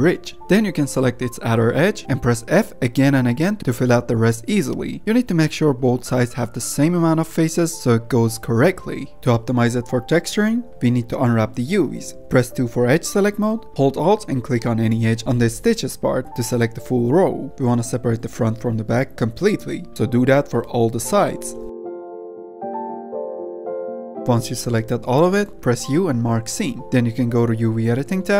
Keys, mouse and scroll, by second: 0.7 click, 1.7-2.2 drag, 2.2 f, 2.5 f, 2.8 f, 3.0 f, 3.4 shift+middle click, 3.8-4.2 scroll up 1, 4.2 shift+middle click, 4.7 f, 5.4 click, 5.9 ctrl+r, 7.5 click, 8.0 shift+click, 8.4 f, 9.1 click, 9.1 middle click, 9.2 F10, 9.6-10.1 drag, 10.1 Tab, 10.8 Tab, 11.0 click, 11.3 Tab, 11.6 middle click, 11.9-12.4 scroll up 3, 12.4 shift+middle click, 12.8-13.4 scroll up 2, 13.4-15.2 middle drag, 15.2 scroll down 1, 15.3 alt+click, 16.3 alt+shift+click, 17.1-17.7 middle drag, 17.7 scroll down 1, 17.8 alt+shift+click, 18.2 middle click, 18.6-19.4 scroll up 2, 19.4 alt+shift+click, 20.4 shift+middle click, 21.1-21.7 scroll up 1, 21.7 alt+shift+click, 22.0-23.1 middle drag, 23.1 alt+shift+click, 23.2 shift+middle click, 23.3 z, 23.8 alt+shift+click, 24.1 middle click, 24.5 z, 24.9 middle click, 25.3 u.